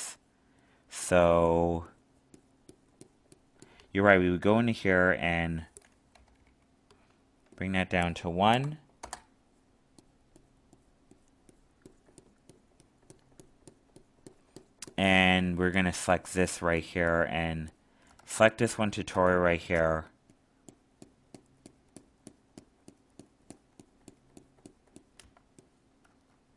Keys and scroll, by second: 18.1 alt+space, 26.0 alt+space.